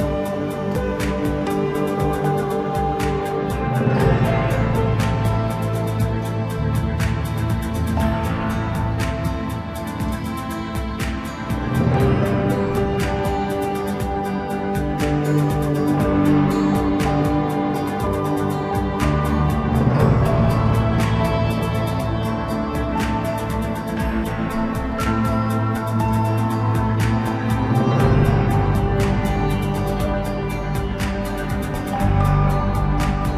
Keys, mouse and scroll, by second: 0.5 KP_1, 1.3-1.7 scroll up 3, 1.7-2.3 scroll down 2, 2.3 typing, 2.7 scroll up 1, 3.3 click, 3.8-5.0 scroll down 1, 5.0-7.7 drag, 7.7 scroll up 1, 8.0-8.3 scroll down 3, 8.3-10.3 middle drag, 10.3-12.2 drag, 12.2 e, 15.5-15.9 scroll up 1, 15.9-17.4 middle drag, 17.4 2, 17.9 click, 18.2 click, 18.5 scroll down 1, 18.7 middle click, 19.1-20.4 scroll up 2, 20.8-23.8 drag, 24.7-26.2 drag, 26.2 x, 28.1-29.5 middle drag, 29.5 Tab, 30.0-31.1 middle drag, 31.1 click, 32.0 click.